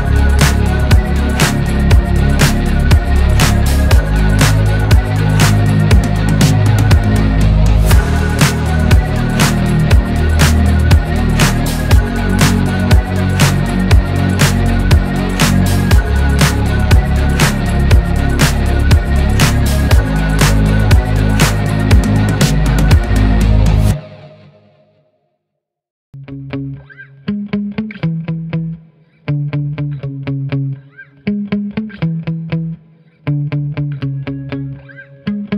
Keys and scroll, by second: 0.5 Right, 1.0-3.9 Right, 3.9 Left, 10.9-12.8 typing, 20.3 typing.